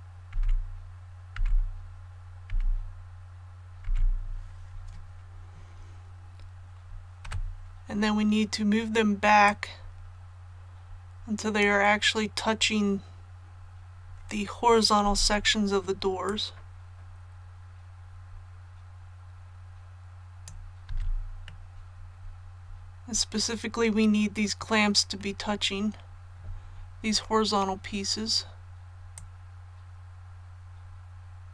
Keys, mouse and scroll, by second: 0.0-0.7 typing, 7.2 KP_7, 9.4-12.0 drag, 12.1 scroll up 1, 15.0 z, 16.2-20.8 drag, 20.8 z, 21.2 scroll down 1, 21.4 scroll up 1, 22.0 scroll up 1, 25.9 scroll up 1, 29.1-31.5 drag.